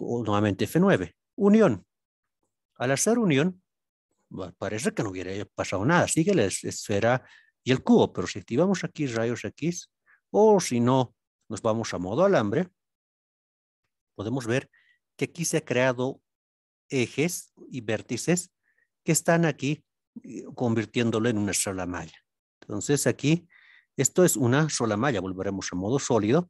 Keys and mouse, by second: 2.6-3.2 middle drag, 3.7 middle click, 5.6 middle click, 8.5 alt+z, 9.3-10.2 middle drag, 10.5 alt+z, 11.4 z, 13.7-14.8 middle drag, 15.3 middle click, 19.2 middle click, 22.1 alt+z, 23.4 alt+z, 24.0-24.4 middle drag, 24.8 z, 26.2-26.4 middle drag.